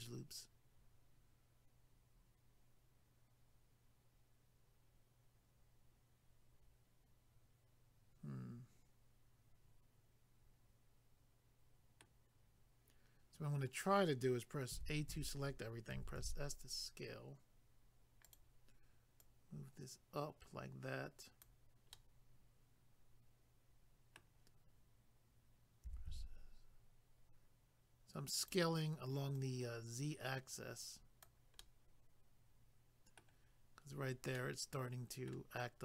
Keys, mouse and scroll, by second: 14.8 a, 18.2 click, 18.4 click, 19.2 click, 21.9 middle click, 28.4 click, 28.5 click, 29.4 click, 31.6 middle click, 34.4 middle click.